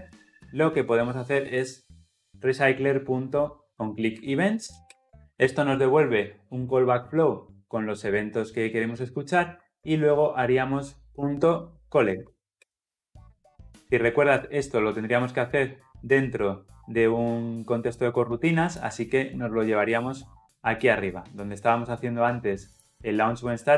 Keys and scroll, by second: 4.9 Return, 12.1 Return, 19.3 ctrl+x.